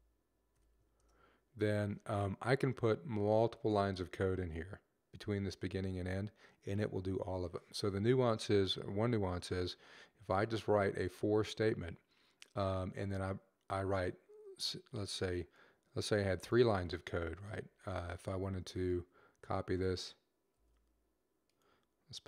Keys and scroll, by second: 0.0-0.5 typing, 2.8-3.6 typing, 20.3 ctrl+c, 21.9 ctrl+v.